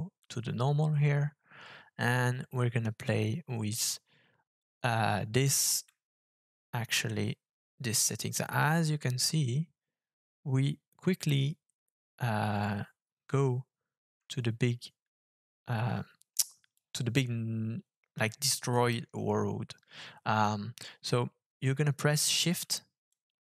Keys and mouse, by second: 5.9-16.8 shift+drag, 23.2-23.4 shift+drag.